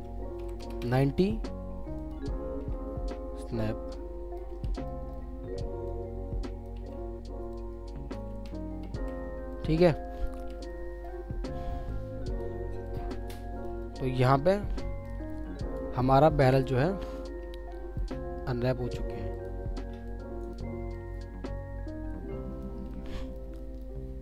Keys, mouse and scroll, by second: 0.4 typing, 0.8 Return, 2.6 typing, 4.5 typing, 6.7 typing, 8.6-10.3 typing, 10.7 alt+middle click, 17.9 alt+middle click, 22.9 alt+middle click.